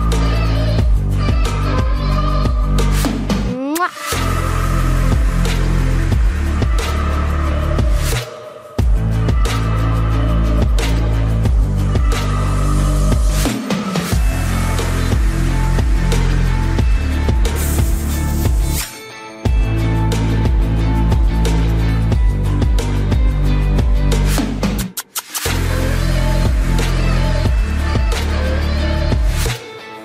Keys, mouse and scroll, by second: 0.0 KP_3, 0.8 Tab, 1.1 z, 1.7-3.4 middle drag, 2.4-3.4 drag, 2.4-3.4 right drag, 3.6 click, 4.3 middle click, 5.1 KP_3, 5.7 KP_Decimal, 6.1 Tab, 6.4 a, 6.7 a, 7.4 ctrl+n, 8.5 s, 10.2 s, 13.0 s, 14.8 z, 15.4-17.3 middle drag, 17.4 s, 18.9-20.1 middle drag, 20.1 KP_7, 21.2 middle click, 22.2 s, 24.4 s, 25.5 s, 27.8 ctrl+s, 28.4 KP_3, 28.9 Tab.